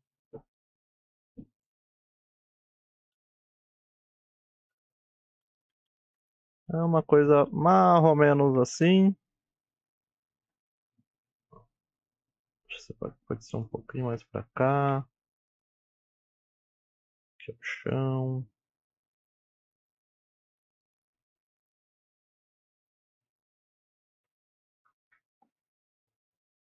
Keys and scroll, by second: 1.3-4.8 typing, 4.2 Tab, 5.4 Tab, 7.5 Tab, 9.3 alt+z, 13.3 g, 15.5-17.3 typing, 19.5 g, 20.4 ctrl+a, 21.7 KP_1, 22.9 e, 23.3 ctrl+a, 23.4 g, 24.7 e, 25.1 ctrl+a, 25.2 g, 25.6 ctrl+a.